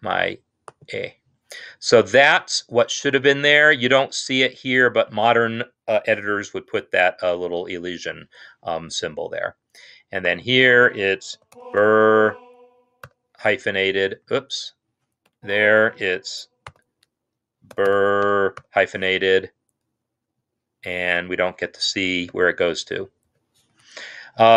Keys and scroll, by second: 2.2 Escape, 11.6 typing, 13.0 typing, 14.2 Escape, 15.3 Left, 16.5 ctrl+l, 17.6-18.4 typing, 22.3-23.1 typing, 23.6 Escape.